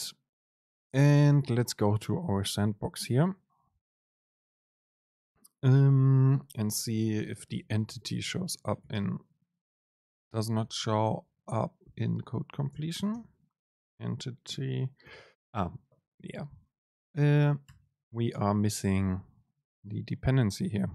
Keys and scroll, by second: 7.0 Return, 7.4 super+space, 12.9 super+space, 17.9 alt+Return.